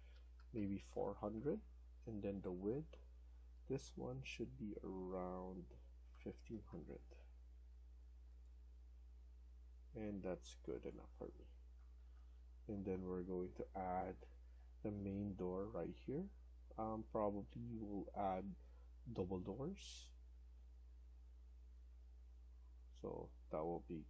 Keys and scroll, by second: 0.0-0.7 typing, 5.8-6.8 typing, 9.7 Escape, 9.9 Escape, 11.7 Down, 11.9 Down, 12.0 Down, 12.2 Down, 12.4 Down, 12.6 Down, 12.9 Down, 13.7 Escape, 14.0 Escape, 20.2 Escape.